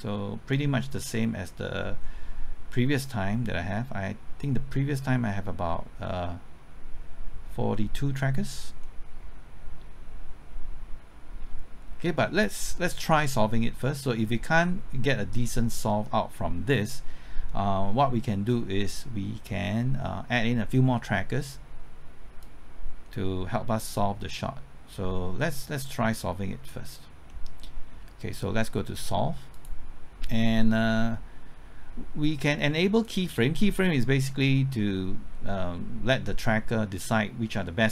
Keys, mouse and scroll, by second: 1.1-12.6 drag, 15.4-15.7 scroll up 1, 15.8 middle click, 22.4-27.3 drag, 27.3-28.6 middle drag, 29.5-30.6 drag, 35.6-36.7 scroll up 1, 37.5 middle click.